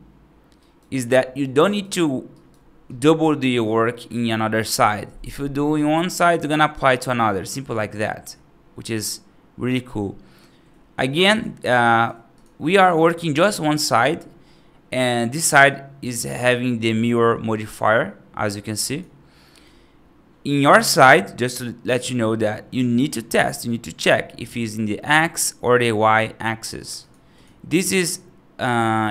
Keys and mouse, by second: 0.5 right click, 1.0 middle click, 1.5 right click, 2.2 right click, 5.6 right click, 6.7 middle click, 9.8 middle click, 11.2 click, 11.8 click, 12.2 click, 12.6 right click, 14.1 middle click, 18.7 click, 26.9-29.1 drag.